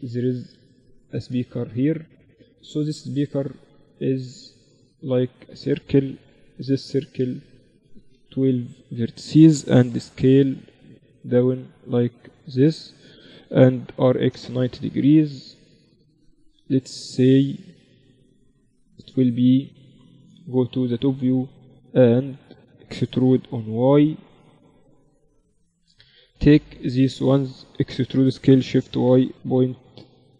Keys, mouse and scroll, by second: 3.2-5.2 drag, 3.2-4.6 right drag, 3.4 shift+a, 6.5 F6, 9.8 s, 10.9 s, 11.6-13.5 drag, 11.8 s, 13.3 r, 19.4 Tab, 20.2 KP_7, 21.3-23.7 drag, 22.1 a, 22.3 a, 23.1 e, 25.3-26.5 middle drag, 26.0 z, 26.5 a, 26.8-28.6 right drag, 27.7 e.